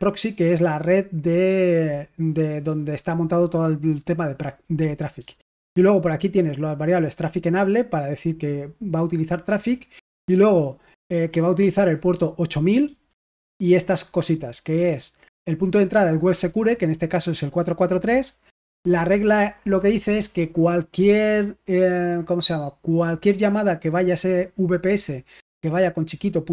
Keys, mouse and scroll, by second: 5.1-7.1 typing, 10.2 j, 12.8 j, 18.6 j.